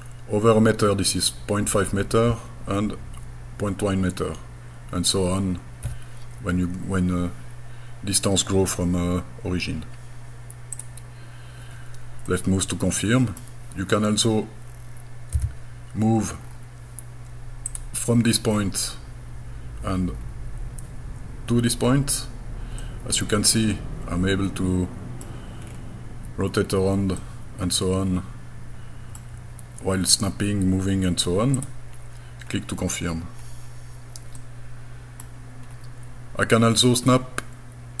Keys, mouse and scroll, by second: 10.8 click, 12.3-13.4 middle drag, 13.8 scroll up 2, 14.3 scroll down 1, 15.4 g, 16.4-16.8 scroll up 5, 17.7 click, 18.5-18.9 scroll down 2, 19.6 scroll down 5, 20.1-20.5 scroll up 4, 22.8-25.2 middle drag, 25.7-26.1 scroll down 4, 27.2-29.2 middle drag, 31.6 click, 32.5 scroll down 2, 33.2-33.6 scroll up 2, 34.4 middle click, 35.6-36.0 scroll down 2, 37.4-38.0 scroll down 1.